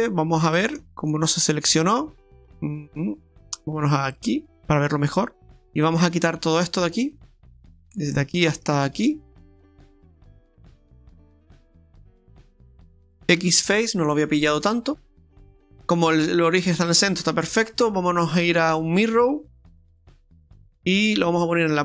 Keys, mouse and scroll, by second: 0.3-0.7 scroll up 3, 0.7 shift+middle click, 1.2-2.5 scroll up 3, 4.2 click, 5.1 right click, 6.1 ctrl+shift+right click, 6.6 right click, 7.4 right click, 8.1 shift+right click, 8.8 ctrl+shift+right click, 9.8 shift+right click, 10.3 right click, 10.7 shift+right click, 11.0 shift+right click, 11.3 shift+right click, 11.5 shift+right click, 11.8 shift+right click, 12.1 shift+right click, 12.4 shift+right click, 13.4 x, 14.0-15.4 scroll down 12, 15.4 middle click, 18.7 click.